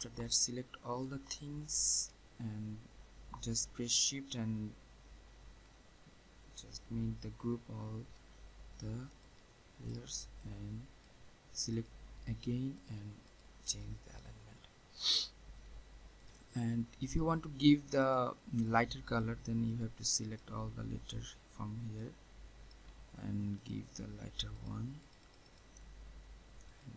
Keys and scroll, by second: 7.3 ctrl+g.